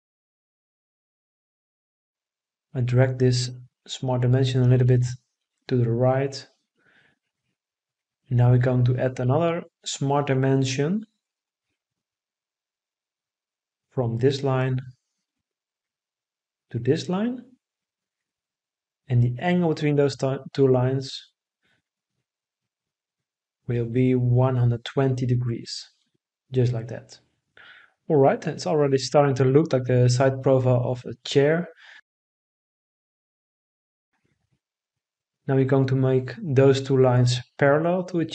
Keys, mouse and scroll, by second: 25.1 1, 25.5 2, 26.0 0, 26.7 Return, 31.0 Escape.